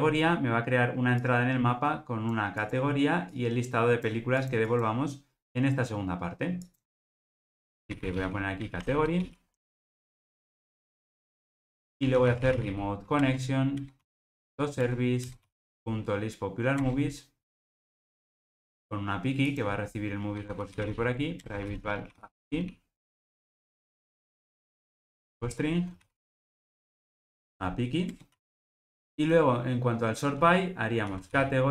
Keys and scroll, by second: 13.2 Return, 21.4 Return, 28.6 super+p.